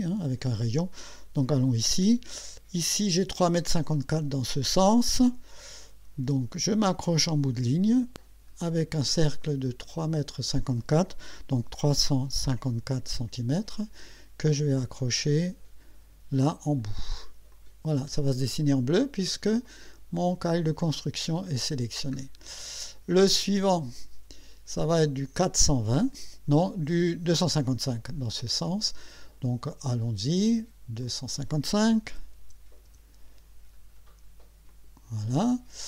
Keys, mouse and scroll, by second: 1.7 click, 5.2 click, 10.0 click, 12.5 KP_5, 13.0 KP_4, 17.5 click, 21.5-21.9 scroll down 2, 23.7 click, 28.3 click, 31.0 click, 32.1 2, 32.4 5, 34.7 click.